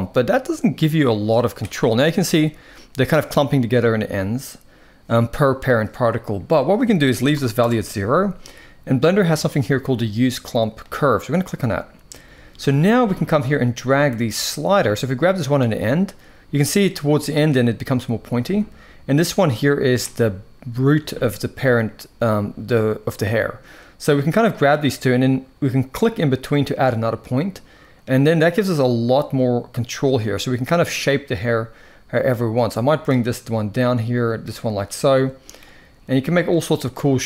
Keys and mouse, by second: 6.4-7.4 drag, 10.6 click, 13.1-15.2 drag, 19.1 click, 22.9-24.4 drag, 25.6 click, 26.5-27.7 drag, 29.0-30.3 drag, 32.0-32.8 drag, 33.5-34.1 drag, 35.0 click, 36.3 click.